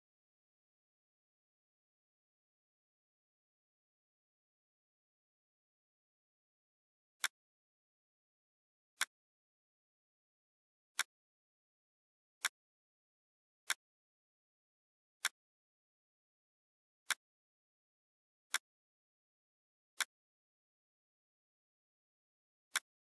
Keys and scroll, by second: 0.0-2.2 typing, 3.3-6.5 typing.